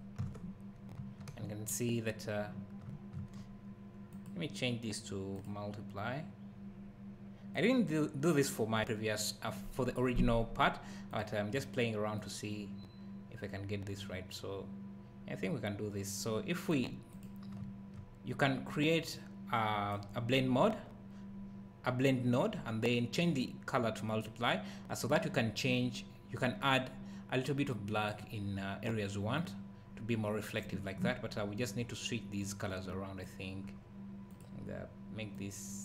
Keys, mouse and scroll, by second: 0.9 `, 3.3-4.1 scroll up 1, 4.1 click, 17.1 click, 17.6 `, 19.1 click, 19.4 click, 28.0 click, 32.4 click.